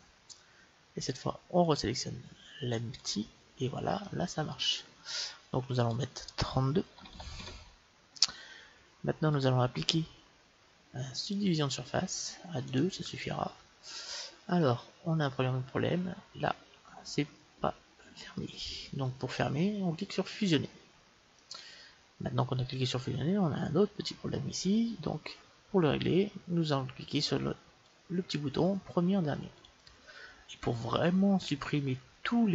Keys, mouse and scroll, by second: 0.2 middle click, 1.0-3.4 drag, 4.0-5.8 middle drag, 5.8-7.8 drag, 9.3-11.2 drag, 12.7-14.6 drag, 14.4-16.4 middle drag, 16.8-18.7 middle drag, 20.4-22.3 drag, 21.4-23.3 middle drag, 27.8-31.2 drag, 30.9-32.5 middle drag.